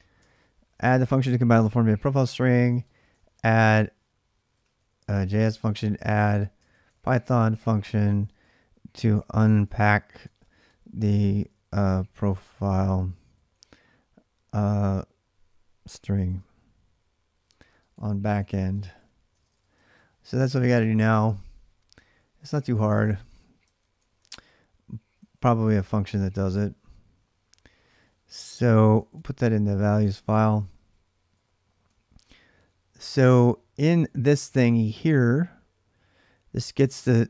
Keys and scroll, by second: 0.0 ctrl+[, 0.0 ctrl+a, 0.1 k, 0.3 k, 2.0-13.4 typing, 15.3-20.4 typing, 20.1 ctrl+[, 20.5 Return, 23.6 ctrl+a, 23.7 ctrl+a, 24.7-26.2 typing, 27.4-30.2 typing, 30.4 ctrl+[, 30.5 ctrl+j, 31.7-37.2 typing.